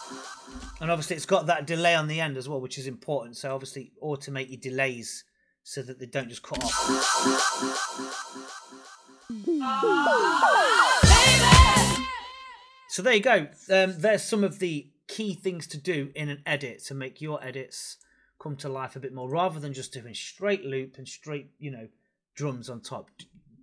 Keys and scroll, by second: 0.4 space, 6.4 space, 11.8 space.